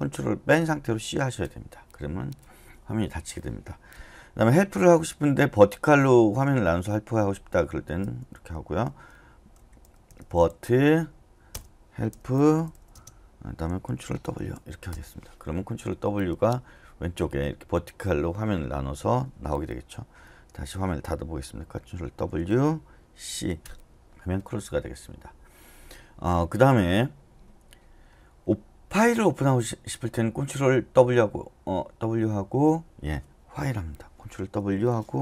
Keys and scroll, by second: 0.9 c, 8.6-13.2 typing, 14.4 ctrl+w, 14.8-15.5 typing, 22.0 ctrl+w, 23.3 typing, 34.6 ctrl+w.